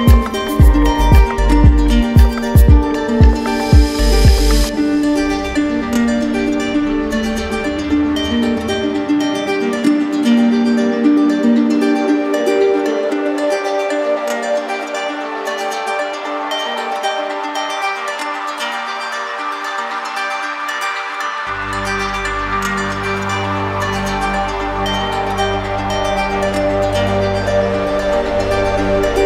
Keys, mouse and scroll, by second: 2.8 click, 3.5 click, 5.2 click, 5.3 right click, 6.3 click, 7.7 click, 8.4 click, 9.7 right click, 11.3 click, 12.0 click, 17.5 click, 22.1 click, 22.9 right click, 24.1 click, 25.3 click, 26.3 click, 27.9 alt+right click, 28.7 alt+right click.